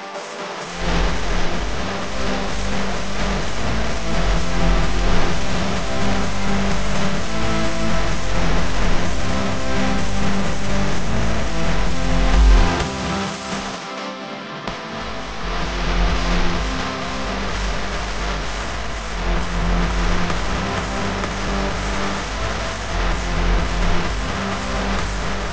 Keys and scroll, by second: 0.9 shift+super+], 2.7 space, 3.9 Right, 4.8-7.0 typing, 8.7 space, 11.8 super+c, 12.4 super+f, 13.3 Right, 14.4-15.2 typing, 18.3 Right, 19.2-20.0 typing, 20.6 Right, 21.5 space, 23.0 Tab, 23.6 a.